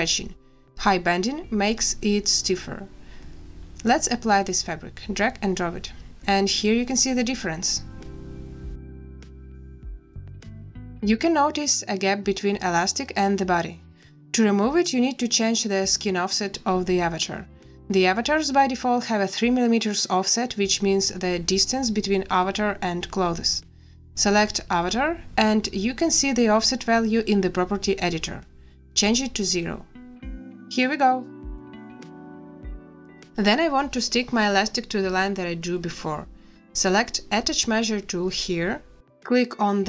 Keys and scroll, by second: 29.0 0, 29.5 Return.